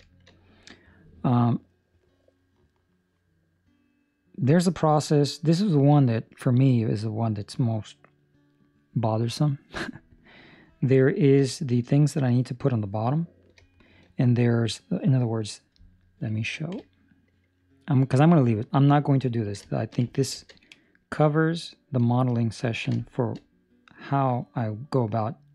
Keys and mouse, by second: 0.2 shift+middle click, 1.1 middle click, 5.2 middle click, 6.4 middle click, 11.1 ctrl+middle click, 11.6 shift+middle click, 11.7 middle click, 13.6 shift+middle click, 19.3 ctrl+middle click, 19.6 shift+middle click, 20.1 ctrl+middle click, 22.7 ctrl+middle click, 22.9 shift+middle click.